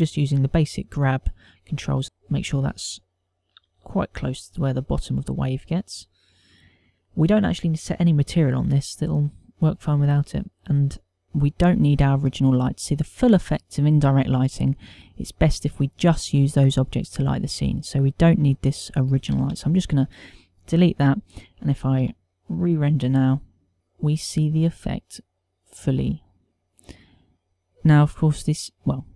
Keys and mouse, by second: 1.3 click, 4.5 g, 5.6 click, 11.2 ctrl+middle click, 11.7 shift+middle click, 13.2 click, 19.8 Delete, 21.7 KP_0, 23.4 F12.